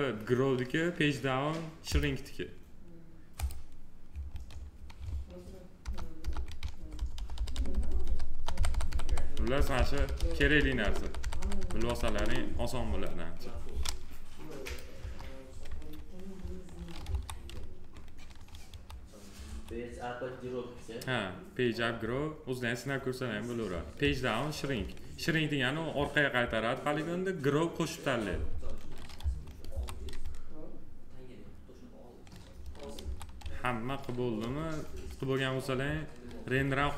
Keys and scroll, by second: 5.6 ctrl+Page_Up, 6.5 ctrl+Page_Down, 8.1 ctrl+Page_Up, 9.1 ctrl+Page_Down, 10.6 ctrl+Page_Up, 14.7 Delete, 16.8 F4, 18.4 F4, 32.8 F4.